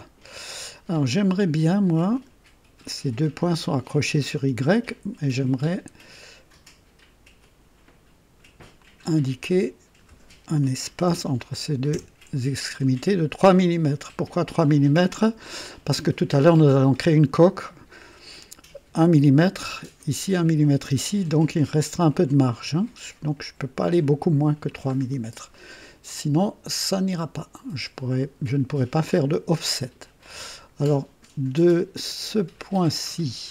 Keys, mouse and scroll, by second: 1.2 right click, 2.1 click, 5.6 click, 7.4 click, 8.8 click, 11.0 KP_3, 11.9 KP_Enter, 13.1 scroll up 1, 14.3-15.1 drag, 24.9-25.3 scroll down 2, 25.5 right click, 26.9-27.9 right drag, 28.1 right click, 29.1 scroll up 2, 29.6 right click, 32.6 click, 33.2 right click.